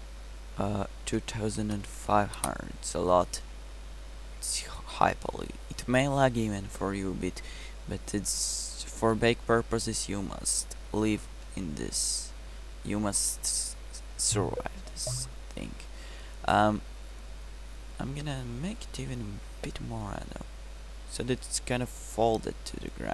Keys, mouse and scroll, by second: 2.0 KP_0, 7.9-8.7 middle drag, 17.2-18.5 middle drag.